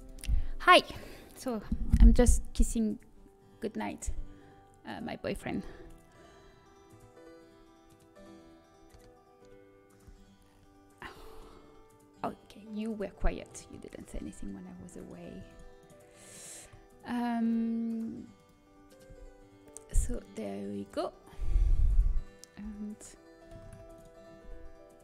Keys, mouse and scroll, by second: 13.6-17.5 right drag, 20.2 g, 23.0 l, 23.6 shift+d.